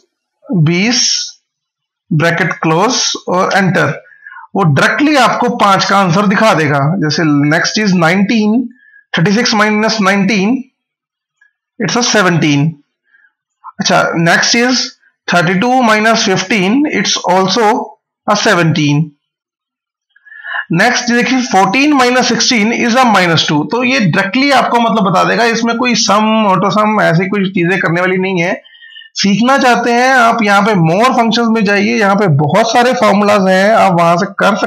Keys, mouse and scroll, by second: 1.2 Right, 2.6 shift+0, 3.3 Return, 8.4 click, 20.5 click, 28.6 click, 31.4 scroll down 1, 32.9 scroll up 1.